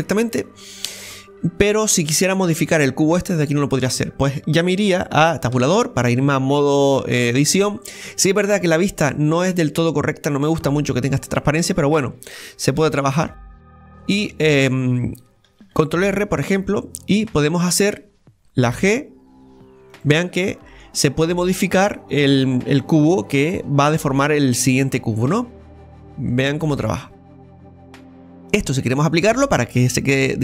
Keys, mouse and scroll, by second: 0.0-0.3 scroll down 1, 0.3-3.3 middle drag, 7.7-10.7 middle drag, 11.4-12.8 middle drag, 12.8 ctrl+r, 13.8-15.6 middle drag, 15.6 ctrl+r, 16.4 middle click, 17.3 right click, 17.6-18.8 middle drag, 18.8 g, 20.2-27.9 middle drag.